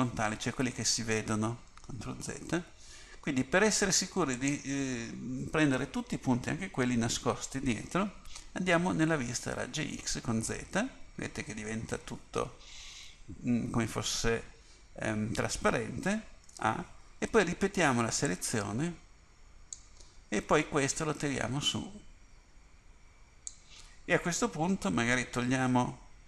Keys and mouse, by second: 2.1 ctrl+z, 4.5-9.8 drag, 9.8 z, 16.6 a, 17.4 b, 21.0-23.6 drag.